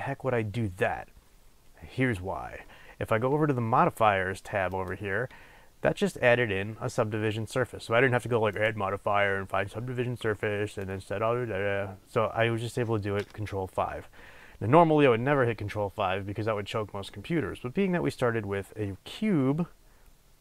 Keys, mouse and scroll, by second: 1.1-3.3 scroll up 1.